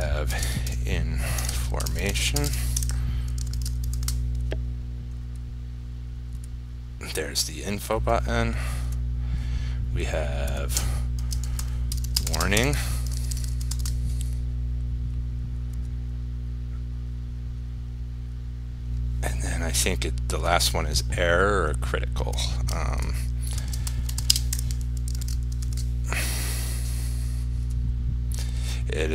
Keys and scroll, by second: 3.6 ctrl+s, 4.2 ctrl+r, 13.4 ctrl+s, 14.0 ctrl+r, 25.3 ctrl+s, 25.9 ctrl+r.